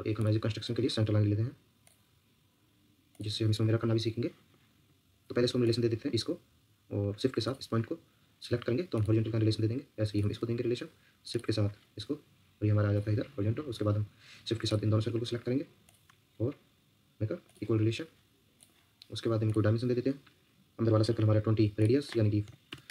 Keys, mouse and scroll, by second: 3.6 Escape, 7.4 shift+click, 9.7 Escape, 11.3 shift+click, 13.9 Escape, 14.9 Escape, 15.8 shift+click, 22.2-22.9 typing.